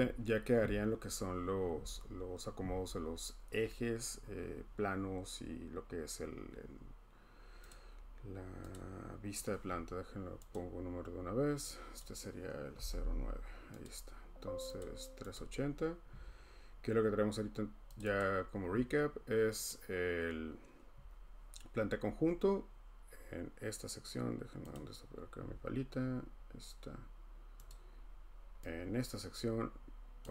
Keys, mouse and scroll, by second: 7.7 click, 8.7 click, 10.5 click, 12.0 click, 12.6-13.5 typing, 13.9 click, 14.8 click, 15.3 click, 18.0 click, 18.2 click, 19.7 click, 24.7 click, 27.7 click, 30.2 click.